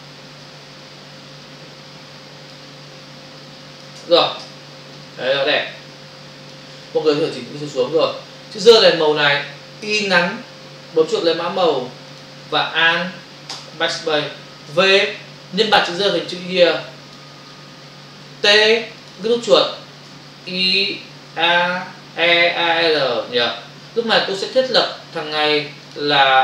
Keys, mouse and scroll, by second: 0.5 ctrl+t, 1.5 shift+click, 2.8 shift+click, 4.4 Return, 5.0 click, 7.5 Down, 12.2 click, 13.5 alt+BackSpace, 14.7 v, 16.0 alt+click, 18.4 t, 19.0 click, 19.3 double click, 20.5 y, 23.3 Return, 25.9 click.